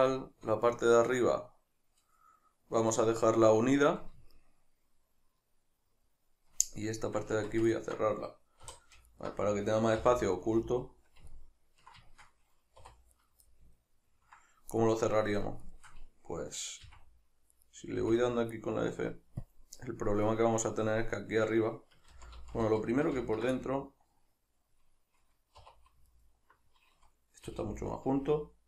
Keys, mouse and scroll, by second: 4.3 shift+middle click, 7.4 Tab, 7.7 ctrl+middle click, 8.7-9.1 middle drag, 8.7 3, 9.1 alt+right click, 10.0 h, 10.5-13.2 middle drag, 12.9 2, 13.2 right click, 13.5-15.7 middle drag, 15.7 shift+right click, 16.9 f, 17.5 right click, 18.1 f, 19.5 click, 20.1-22.1 middle drag, 22.1 ctrl+z, 23.6 middle click, 25.6 2, 26.1 alt+right click, 27.4 g.